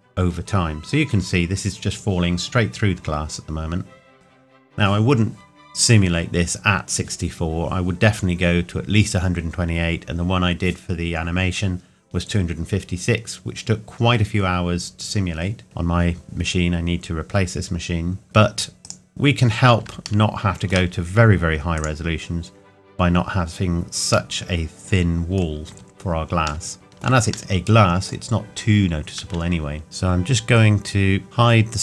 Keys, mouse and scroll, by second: 18.2 click, 20.2 shift+middle click, 21.7 click, 22.5-24.3 scroll up 1, 24.3 middle click, 25.7 Tab, 26.6 shift+middle click, 28.4-29.8 scroll up 1, 29.8 shift+middle click, 31.2 click.